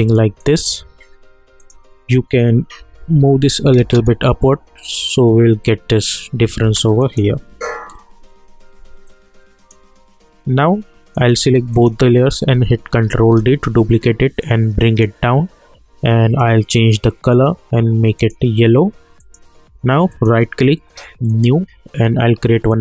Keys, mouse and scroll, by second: 0.4 click, 2.8 Up, 3.8 space, 6.6 space, 7.0 click, 7.5 u, 9.0-11.1 drag, 11.7 shift+click, 13.1 ctrl+d, 14.4-16.3 drag, 20.1 right click, 21.3-22.8 drag.